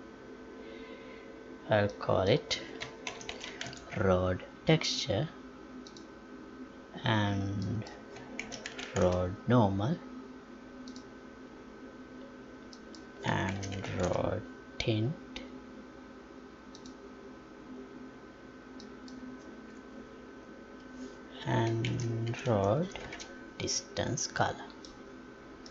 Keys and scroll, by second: 20.7 Delete, 23.1 space.